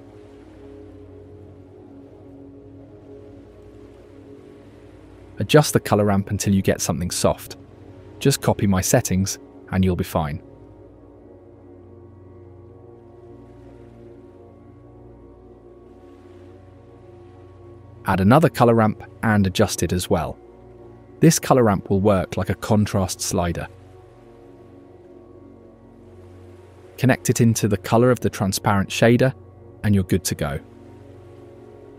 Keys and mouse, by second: 1.7-2.9 drag, 6.2-10.0 drag, 10.9-11.9 drag, 14.3-15.6 shift+middle drag, 16.0 ctrl+middle click, 17.7 space, 18.4 shift+a, 22.9 middle click, 23.9 middle click, 24.1-24.8 drag, 24.8-27.1 middle drag, 27.6-28.2 middle drag, 28.9-30.3 middle drag.